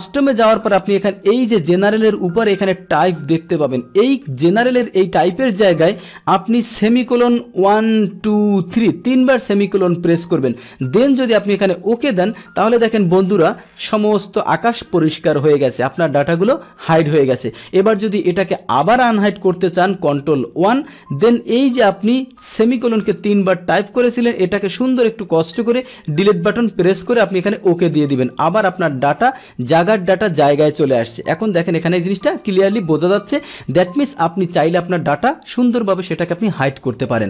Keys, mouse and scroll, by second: 0.8-1.8 drag, 11.8 click, 20.1 ctrl+1, 22.5 click, 26.3 Delete, 27.5 click, 29.9 click, 30.3 click, 30.5 click, 30.6 click, 30.8 click, 31.6 click, 32.3 click.